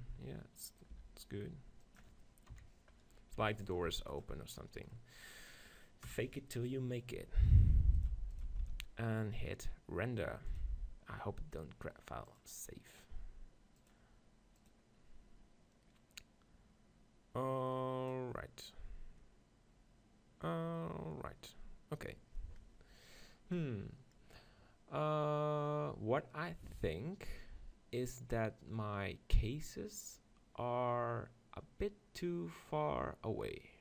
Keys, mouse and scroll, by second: 0.8 middle click, 1.0 r, 2.5 KP_7, 3.4 r, 3.7-6.2 drag, 3.9 g, 6.2 KP_0, 8.0-10.1 drag, 10.5-15.6 drag.